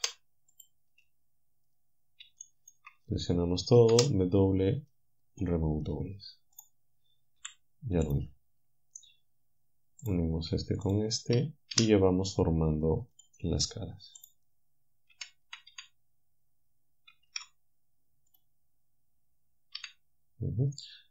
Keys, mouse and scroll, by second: 0.0 Delete, 0.6 click, 2.4 shift+right click, 3.1 a, 3.9 w, 5.5 click, 6.6 click, 7.4 g, 10.9 shift+click, 11.8 f, 13.2 click, 15.2 f, 17.3 ctrl+Tab, 18.4 click, 19.8 f.